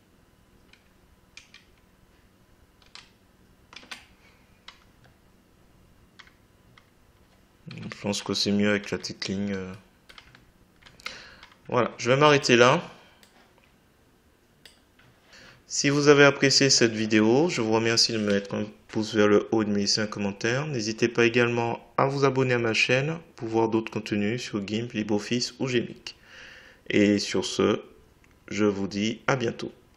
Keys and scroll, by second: 1.4 Left, 3.8 Left, 8.0 Right.